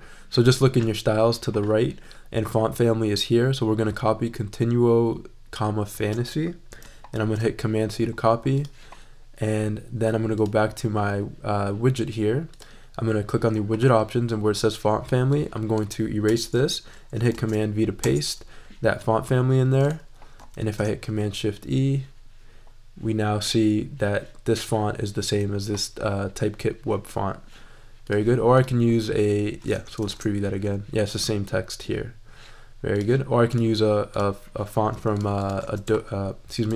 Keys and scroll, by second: 7.1 super+c, 16.2 BackSpace, 17.1 super+BackSpace, 17.3 super+v, 18.0 super+Return, 18.5 Return, 20.6 shift+super+e, 30.0 shift+super+e, 35.7 super+a.